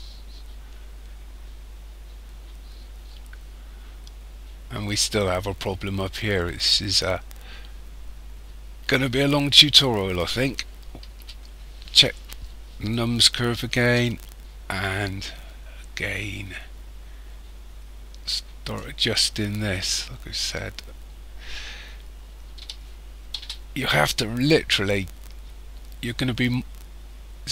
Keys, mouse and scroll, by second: 3.7-6.0 scroll up 2, 6.0-7.0 scroll down 4, 7.0 scroll down 1, 9.7 right click, 11.1 KP_1, 13.8 Tab, 15.2 click, 19.2-21.4 scroll up 16, 22.6 g.